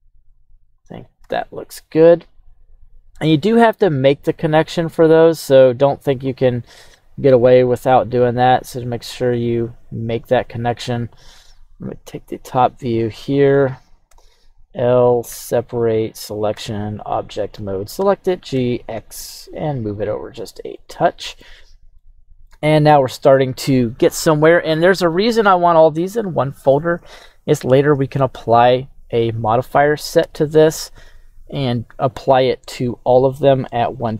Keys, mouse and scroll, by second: 2.2-3.1 drag, 4.0-5.0 drag, 6.9 middle click, 8.3 e, 10.6 click, 11.3 KP_7, 14.0 l, 15.2 o, 16.5 Tab, 17.1 right click, 18.0 g, 18.5 x, 20.4 click, 20.7 middle click, 21.5-21.9 scroll down 1, 21.9 middle click, 30.2 n, 32.3-33.2 scroll down 1, 33.2 scroll down 1, 33.7 click.